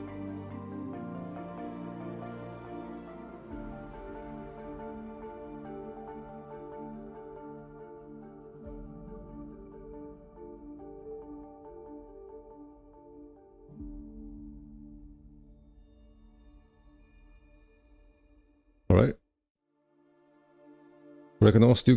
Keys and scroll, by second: 12.5 2, 14.2 ctrl+r, 14.3 2.